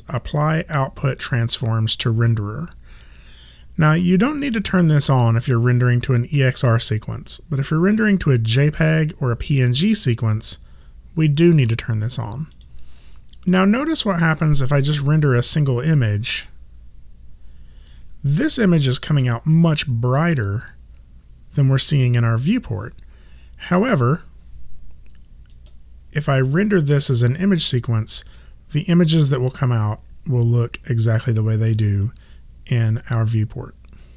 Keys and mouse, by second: 12.5 click, 14.9 click, 17.9 click, 23.7 click.